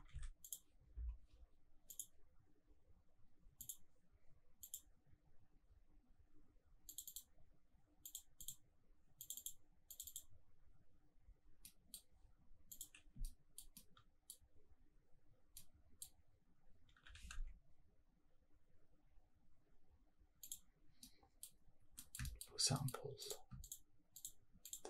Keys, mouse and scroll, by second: 1.9-3.7 drag, 11.6 middle drag, 12.7 click, 13.0 scroll down 1, 13.2-13.5 shift+middle drag, 13.7-14.3 middle drag, 14.5 scroll down 1, 15.0-15.5 scroll up 2, 15.5-16.0 middle drag, 16.5-17.2 scroll down 2, 16.9 g, 17.3 shift+z, 20.4 click, 21.0-21.4 middle drag, 21.5-22.0 scroll up 2, 22.0 middle click, 22.2 shift+middle drag, 22.7 middle click, 23.2 click, 23.6 shift+click, 24.1 shift+click, 24.6 shift+click.